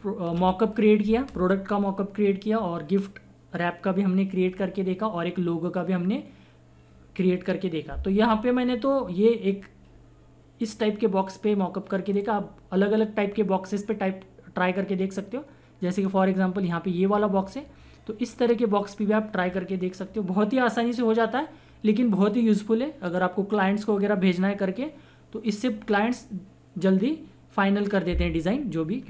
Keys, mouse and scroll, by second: 10.6 click, 16.0 click.